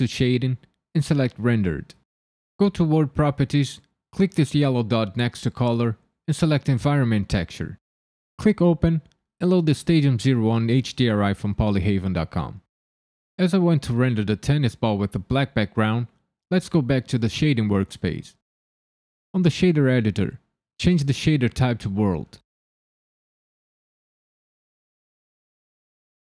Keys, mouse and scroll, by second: 3.1 click, 4.9 click, 8.7 click, 20.6 click, 22.2 middle click, 22.9 ctrl+middle click, 24.2 click, 24.7 g, 25.1 click, 25.6 shift+d.